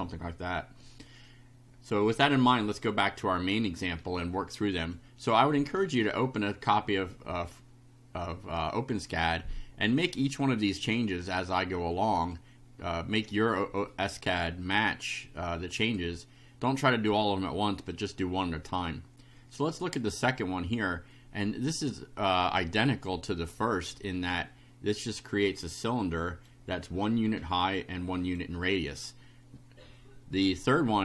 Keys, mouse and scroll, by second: 4.9 click, 9.6 click, 10.6 click, 11.9 click, 14.9-16.1 drag, 21.1-22.7 drag, 25.9 right click, 26.7-27.3 scroll up 3, 27.6 right click, 30.7-31.0 drag.